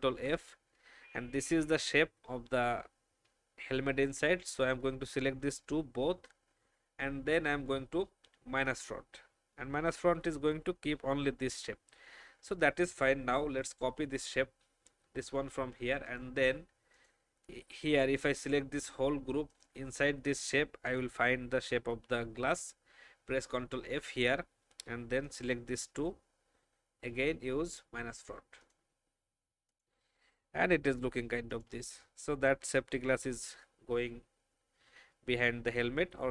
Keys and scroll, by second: 0.1 ctrl+f, 23.8 ctrl+f.